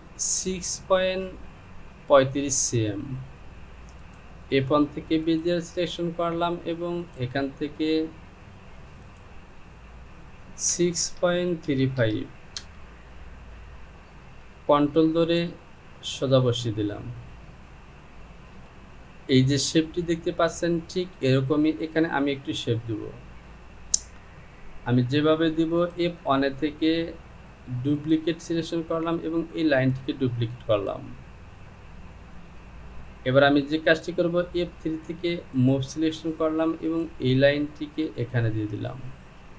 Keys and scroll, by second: 10.7 KP_6, 12.6 typing.